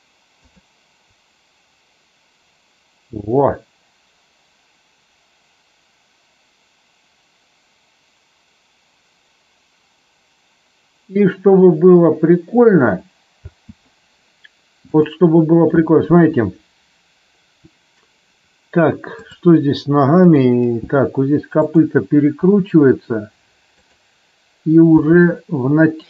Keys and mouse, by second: 0.4 click, 13.3 space, 14.9 click, 19.1 click, 20.2 click, 22.3 r, 23.8 click, 24.9 g.